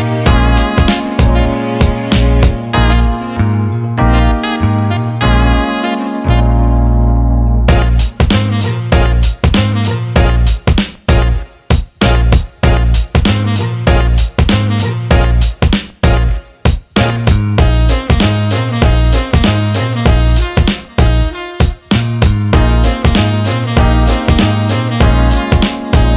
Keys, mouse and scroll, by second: 1.4 alt+shift+middle drag, 1.7 alt+middle click, 2.6 Tab, 3.1-6.9 drag, 7.2 alt+middle click, 12.8 click, 13.6-16.1 drag, 16.3 alt+middle click, 17.2 click, 18.5 alt+middle click, 20.9-24.8 drag.